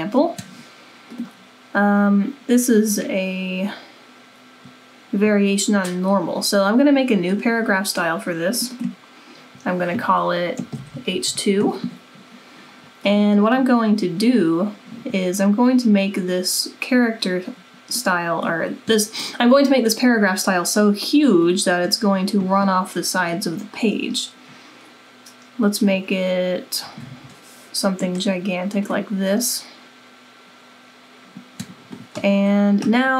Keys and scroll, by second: 10.8 h, 11.1 h, 15.9-16.6 typing, 26.6-27.6 typing.